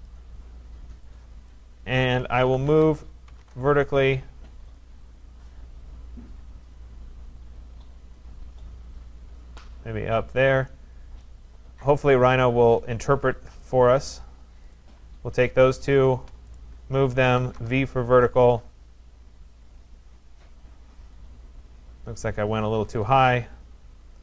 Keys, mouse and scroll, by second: 0.1 click, 1.5 click, 2.0-3.4 typing, 4.8 click, 7.1-7.9 typing, 7.4-9.9 drag, 11.2-13.6 right drag, 13.6 click, 14.7 click, 16.1 shift+click, 16.6 right click, 17.4 v, 17.6 Return, 17.9 v, 18.3 click, 19.6 Return, 21.1 click, 21.6-22.1 scroll down 3, 22.1 scroll up 4, 22.5 scroll, 22.5 v, 23.0 shift+click.